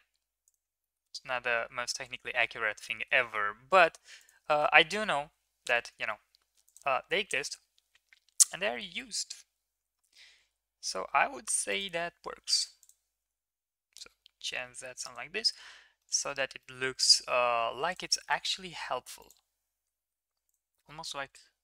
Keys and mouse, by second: 2.3 middle drag, 2.9 shift+middle drag, 3.2 middle click, 3.8 shift+middle click, 4.5 shift+middle click, 5.0 Tab, 5.7 shift+middle click, 6.6 alt+click, 9.7 g, 12.8 click, 13.1 g, 15.4 Tab, 16.0 middle click, 16.6 middle click, 18.2 middle click, 18.5 ctrl+s, 19.2 right click, 20.0 ctrl+a, 21.5 ctrl+a.